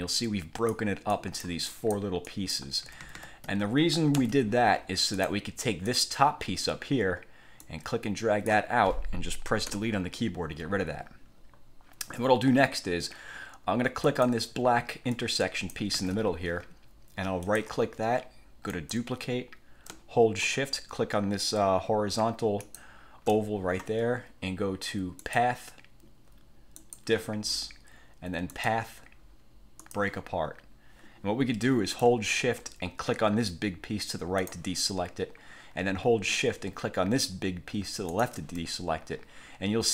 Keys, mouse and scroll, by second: 0.3 click, 1.2 click, 2.4 click, 3.0 ctrl+z, 4.2 ctrl+z, 5.2 click, 6.0 click, 7.8-8.8 drag, 9.8 Delete, 14.2 click, 15.3-16.1 drag, 16.1 ctrl+z, 17.6 click, 18.8 click, 22.8 shift+click, 25.4 click, 26.9 click, 28.6 click, 30.0 click, 34.5 shift+click, 38.2 shift+click.